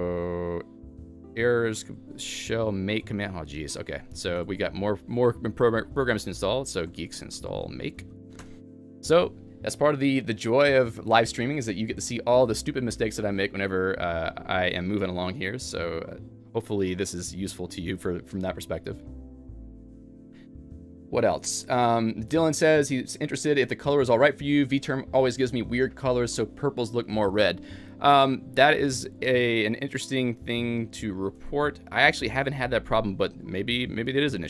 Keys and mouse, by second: 1.2-1.9 typing, 4.1-5.1 typing, 30.0-34.4 typing.